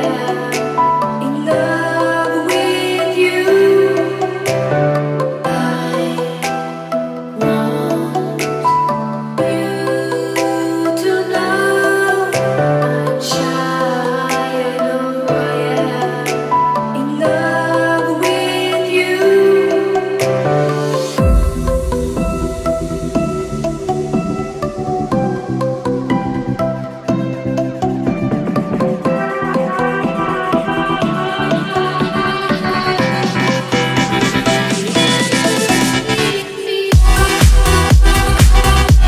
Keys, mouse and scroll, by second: 1.7 scroll up 2, 2.9-4.2 drag, 5.6 click, 7.6 click, 9.3-10.3 drag, 11.1 click, 13.6-14.7 drag, 16.9-17.5 drag, 19.2 click, 20.1 click, 23.1 click, 24.2 click, 25.7 click, 26.7 click, 27.2 click, 28.8 click, 29.4 click, 32.6 click, 33.2 click, 33.9 click, 34.7 click, 35.2 right click.